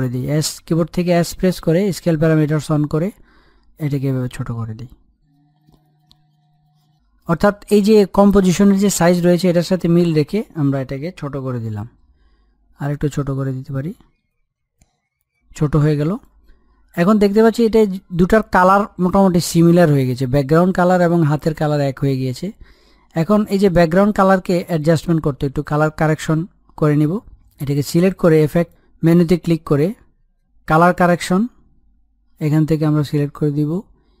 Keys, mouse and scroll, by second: 3.0-5.6 drag, 5.6 middle click, 5.8 scroll up 1, 6.0 click, 6.7-10.3 middle drag, 10.3 click, 13.2 middle click, 13.6-14.2 scroll up 1, 14.2 click, 14.8 scroll down 1, 15.1 middle click, 15.8 click, 16.5-17.0 scroll up 1, 17.0-18.3 middle drag, 18.3-19.0 scroll down 1, 19.0-23.1 middle drag, 23.1 click, 23.4-23.8 scroll down 1, 24.7 click, 28.5 click.